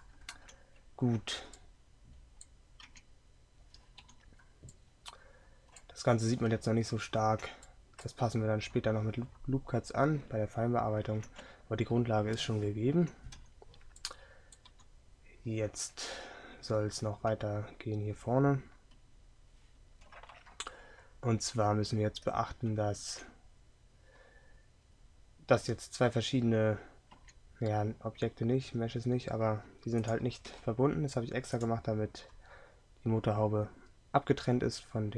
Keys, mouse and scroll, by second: 2.9 Tab, 10.8-13.4 middle drag, 13.4 z.